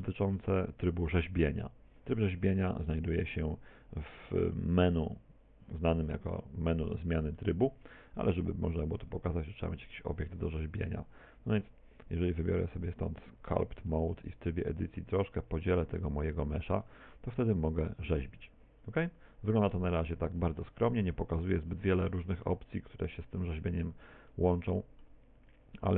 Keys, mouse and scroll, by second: 0.8 middle click, 3.2 click, 7.0 middle click, 8.0 shift+a, 9.2 s, 13.3 click, 13.8 Tab, 14.8 w, 16.0 w, 16.9 Tab, 17.5 click, 22.6 middle click, 25.6 click.